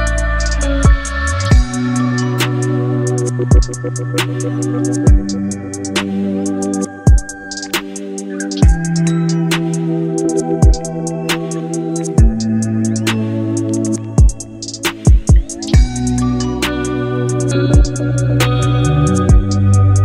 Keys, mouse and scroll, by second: 1.3-7.8 drag, 11.7 click, 13.5 right click, 14.7 click, 18.9-20.0 drag.